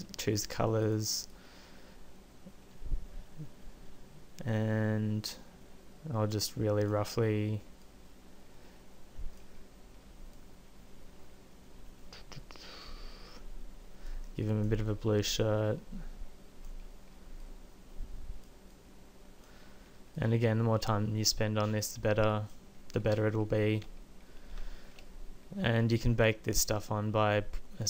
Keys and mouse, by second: 0.4 f, 1.4-3.6 drag.